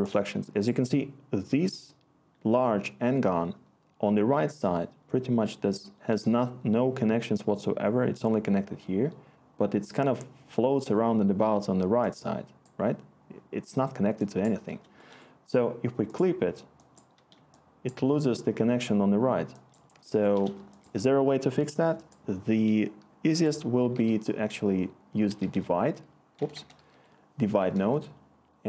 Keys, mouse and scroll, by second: 5.3-7.1 scroll, 8.8-10.4 scroll, 23.3 Tab, 23.8 typing, 25.0-28.2 typing.